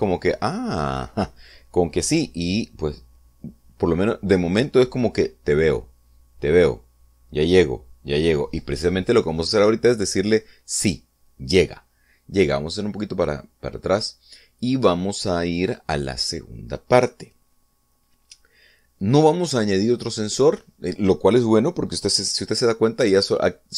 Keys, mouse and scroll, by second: 12.2-12.5 scroll down 2, 13.2 scroll up 2, 13.8-15.0 middle drag.